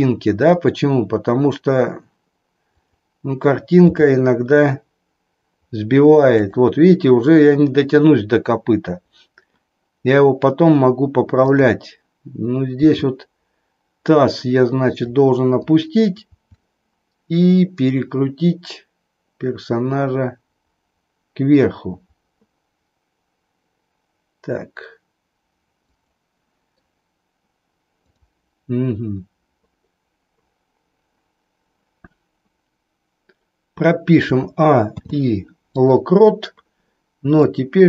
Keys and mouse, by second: 2.7 click, 4.0 g, 11.3-12.3 drag, 12.9 g, 15.0 click, 16.3 r, 25.9 click, 28.1 click, 34.1 a, 35.0 i, 37.4 middle click.